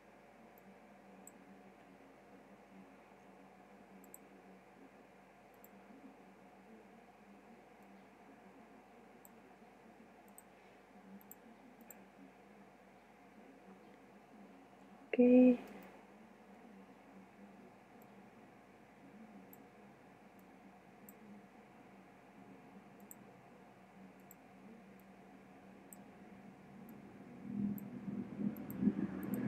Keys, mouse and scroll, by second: 0.7-2.1 drag, 2.2 KP_0, 14.6 Escape, 16.5 click, 16.6 KP_7, 20.5 click, 22.0 click, 23.1-26.8 drag, 27.0 click.